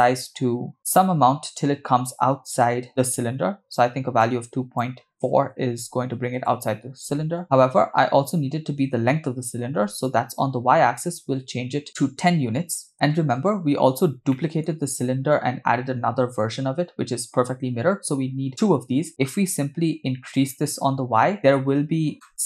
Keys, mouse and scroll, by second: 4.2-6.6 shift+drag, 10.0-12.9 drag, 13.6-14.3 scroll down 2, 14.4 middle click, 19.1 middle click, 20.4-21.5 shift+drag, 22.0 scroll down 2, 22.3 click.